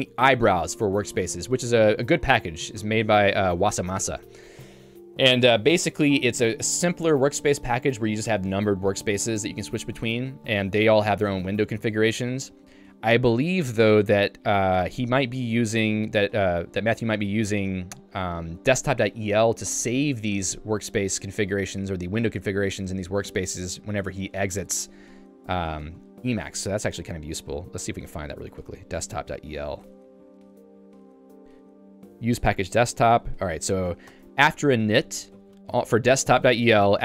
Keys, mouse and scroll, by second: 34.2 Return, 35.0 k, 35.3 j.